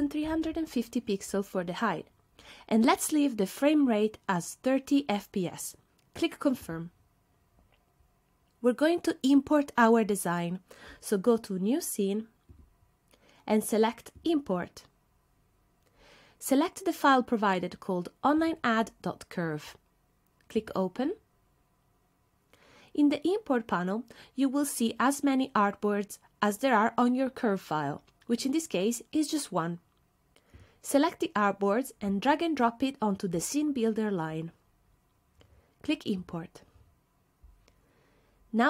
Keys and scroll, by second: 0.0-1.1 typing.